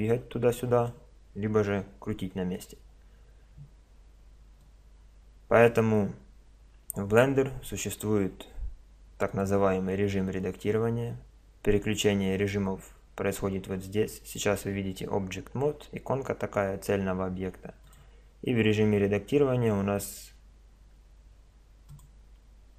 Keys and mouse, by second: 1.7 r, 4.6-6.5 drag, 9.3-11.2 drag, 17.9-19.6 drag.